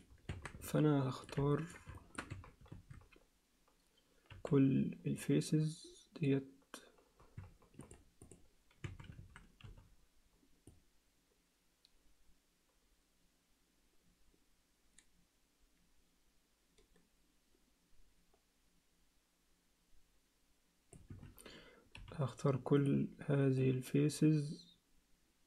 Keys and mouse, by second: 0.0 click, 0.3 Tab, 0.6 alt+middle click, 1.5 ctrl+alt+middle click, 2.0 alt+shift+middle click, 2.3 a, 4.3 c, 8.3 click, 8.8 a, 9.6 c, 22.0 c.